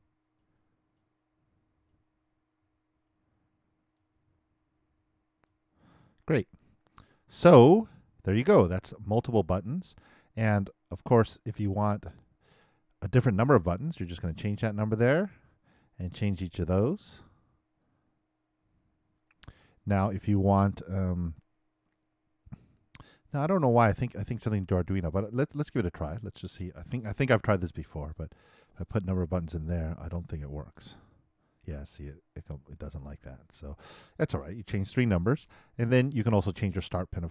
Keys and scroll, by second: 27.4 super+c, 28.8 super+v.